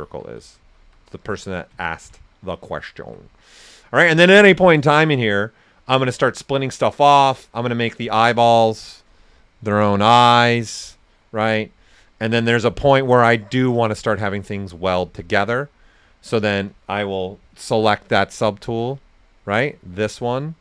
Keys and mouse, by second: 3.0 s, 3.0-7.3 drag, 9.9 shift+click, 12.9 click, 18.0 click.